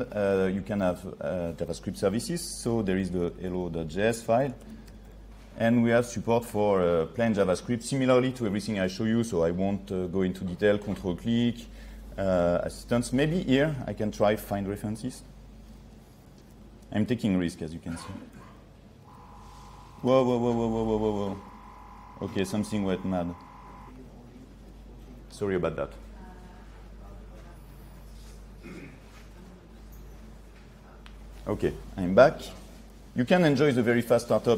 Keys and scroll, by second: 2.7 ctrl+3, 19.0 ctrl+1, 21.4 ctrl+1.